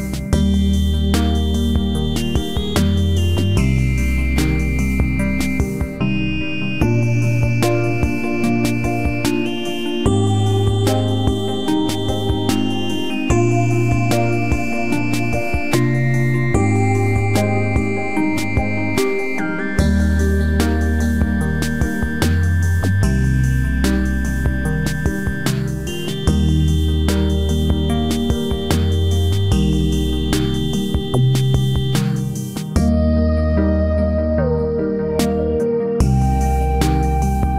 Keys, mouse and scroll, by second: 0.7-2.0 right drag, 1.4 KP_Decimal, 2.5 b, 3.7 click, 4.6 click, 6.2 ctrl+r, 7.4-9.1 right drag, 8.2 g, 8.8 b, 9.2 g, 12.0 right click, 12.7 g, 14.2 b, 14.7 g, 15.5 right click, 16.1-17.9 right drag, 16.4 b, 16.7 g, 21.0-23.8 right drag, 21.2 g, 22.3 g, 23.8-25.6 drag, 24.0 b, 24.4 g, 25.8 click, 26.1 b, 26.4 g, 26.5-27.8 right drag, 28.0-29.7 right drag, 28.4 b, 28.6 g, 30.2 g, 31.0-32.8 right drag, 31.4 g, 32.9-34.8 right drag, 33.3 b, 33.5 g, 35.7-37.5 right drag, 35.9 b, 36.3 g.